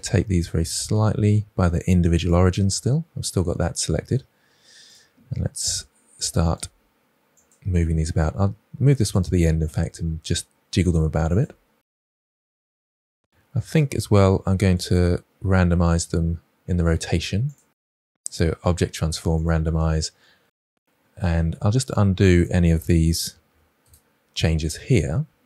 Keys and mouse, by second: 2.1 click, 4.8 click, 5.6 r, 6.4 click, 6.6-10.4 typing, 8.1 click, 9.5 click, 12.4 KP_7, 16.7-20.0 drag, 21.7-23.3 drag, 24.7-25.4 drag.